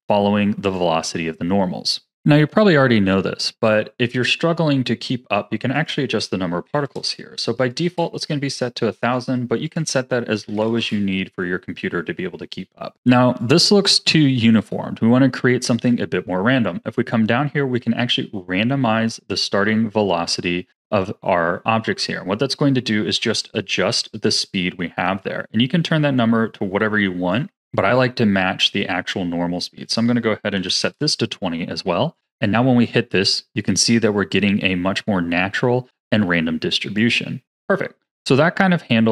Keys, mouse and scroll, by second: 3.7 drag, 5.7-6.9 drag, 6.9 KP_0, 9.0 click, 9.6-12.6 drag, 13.4-16.4 drag, 22.1-24.5 scroll up 1, 24.5-27.5 drag, 29.8-35.4 drag, 36.9-39.1 drag.